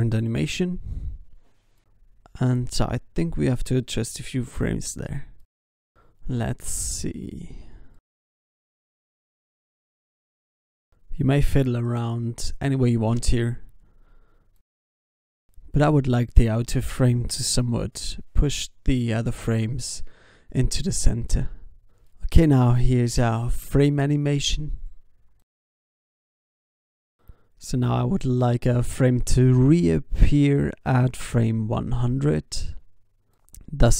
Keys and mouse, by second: 0.0 ctrl+s, 1.3 ctrl+s, 3.6 alt+a, 3.8 ctrl+s, 14.2 g, 16.4 s, 17.5 i, 19.5 alt+a, 19.5 i, 19.7 ctrl+s, 20.4 ctrl+s, 21.2 ctrl+s, 23.6 ctrl+s, 24.1 alt+a, 24.3 ctrl+s, 24.7 alt+a, 24.9 ctrl+s, 26.3 ctrl+s, 28.9 alt+a, 29.0 ctrl+s, 29.8-31.7 drag, 31.7 ctrl+s.